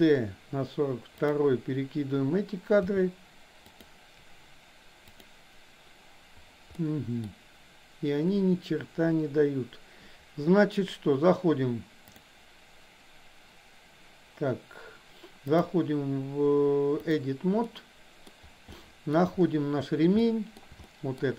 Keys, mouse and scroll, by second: 3.0 g, 5.1 click, 6.7 middle click, 12.2-13.7 drag, 15.5-17.2 drag, 17.7 middle click, 18.7 shift+middle click, 20.4 middle click, 20.9 shift+middle click.